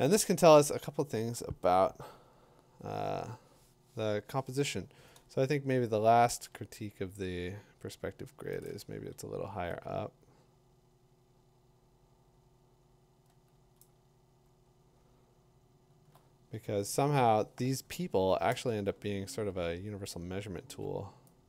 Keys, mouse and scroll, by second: 3.2 middle click, 5.4 middle click, 5.6 middle click, 5.7 middle click, 6.1 middle click, 6.1 middle click, 8.7 click, 13.8 click, 14.4 middle click, 14.5 middle click, 14.9 middle click, 15.0 middle click, 15.0 middle click, 15.2 middle click, 15.8 middle click, 19.0 middle click, 19.1 middle click, 19.3 middle click, 19.3 middle click, 19.4 middle click, 19.9 middle click, 20.0 middle click, 20.2 middle click, 20.3 middle click, 20.5 middle click, 20.6 middle click.